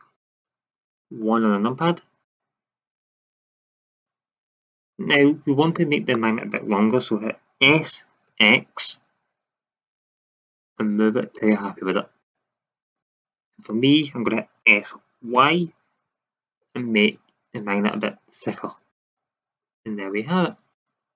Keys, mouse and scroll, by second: 0.2 click, 1.1 KP_1, 7.6 s, 11.3-12.4 drag, 13.1 middle drag, 14.6 s, 18.9-20.6 drag.